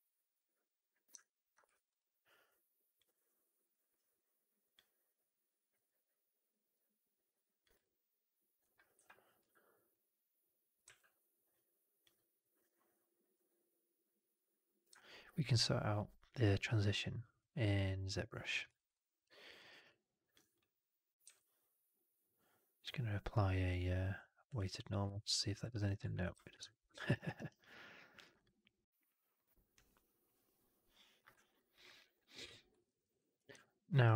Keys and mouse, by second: 1.1-1.4 alt+drag, 1.5 3, 1.8-3.6 drag, 4.5-6.0 drag, 7.7 alt+click, 8.8 4, 9.3 e, 9.8 click, 10.7 w, 12.0-12.6 drag, 13.2-14.7 drag, 14.8-17.3 alt+drag, 18.6 alt+right drag, 18.8-19.4 alt+drag, 19.5 alt+right drag, 19.7-20.2 alt+drag, 21.1 q, 25.0-25.7 alt+drag, 26.1 ctrl+z, 26.6 drag, 26.9 middle drag, 27.0 right click, 27.2 right click, 27.5-28.1 drag, 28.3 click, 31.3 alt+right drag, 31.4 alt+drag, 31.7 alt+middle drag, 31.9 alt+right drag, 32.1 alt+click, 32.7 alt+middle drag, 32.9 alt+right drag.